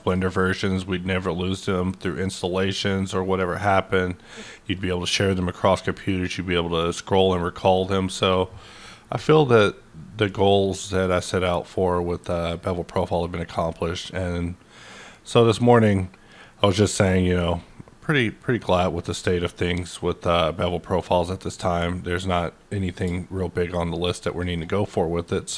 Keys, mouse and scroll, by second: 10.5-12.7 drag, 18.3-24.6 drag.